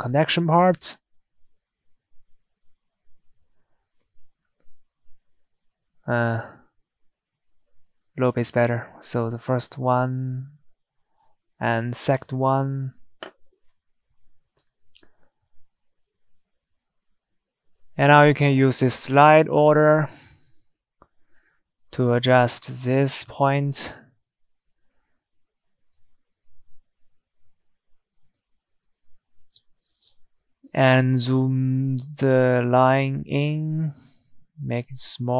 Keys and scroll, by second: 1.9 Escape, 6.6 Escape.